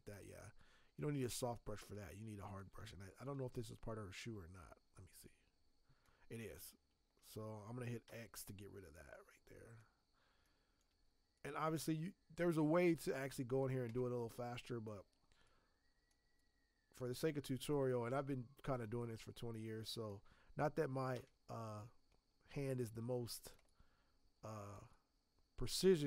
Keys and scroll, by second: 8.0 x, 21.1 x.